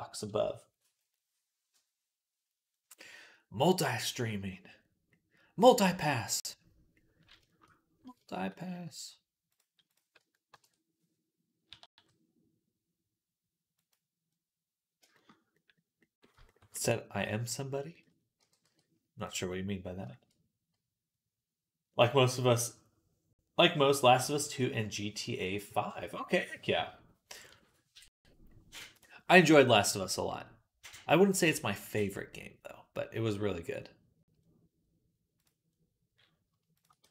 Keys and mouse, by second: 2.6-10.3 middle drag, 10.4 ctrl+KP_Add, 11.5 s, 14.3 middle click, 15.4 middle click, 16.4-30.9 middle drag, 30.9 click, 30.9-34.6 middle drag, 34.6-37.1 drag, 36.9 g.